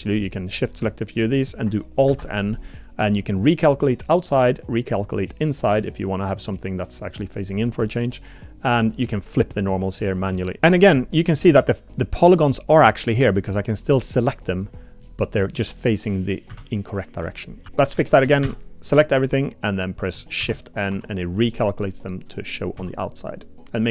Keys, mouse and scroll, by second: 0.0 shift+click, 2.1 alt+n, 10.1 click, 11.5 middle click, 12.7 click, 13.3 click, 14.3 click, 14.6 click, 15.0 middle click, 16.5 a, 17.7 alt+n, 17.7 Escape, 18.0 shift+click, 18.4 a, 20.4 shift+n, 20.9 Tab, 22.8 z.